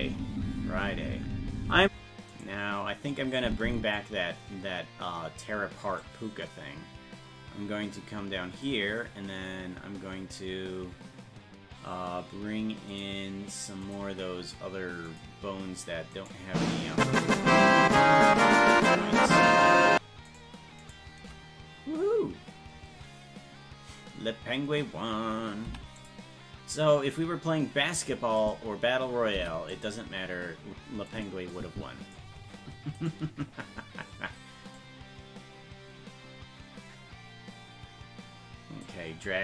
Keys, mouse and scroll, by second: 0.0 space, 2.3 space, 2.4 right click, 3.4 click, 6.0-8.7 drag, 12.9 click, 13.8 click, 15.1 click, 16.2-17.9 right drag, 17.9 click, 19.7 shift+right click, 28.4 click, 29.4 i, 31.1-33.0 drag, 33.0 right click, 34.8-38.0 drag, 38.1-39.4 drag.